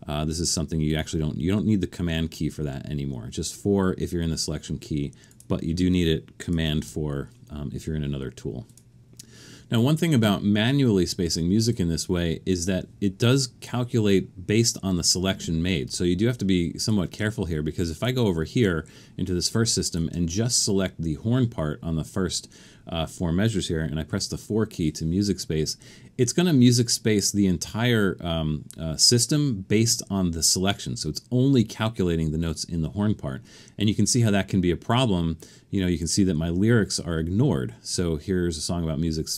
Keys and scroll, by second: 6.8 super+4, 24.1 4.